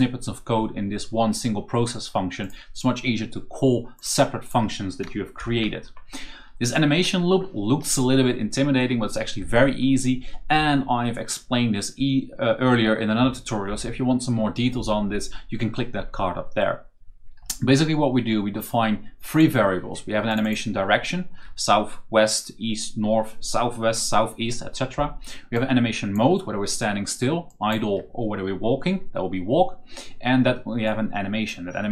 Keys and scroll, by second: 5.2 ctrl+v.